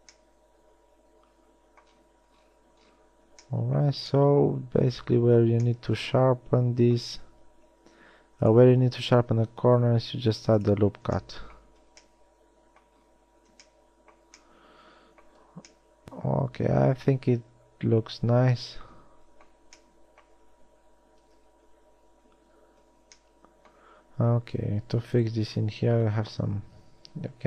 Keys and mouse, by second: 0.1 a, 8.3 ctrl+r, 15.9 Tab, 21.9 Tab, 26.5 Tab.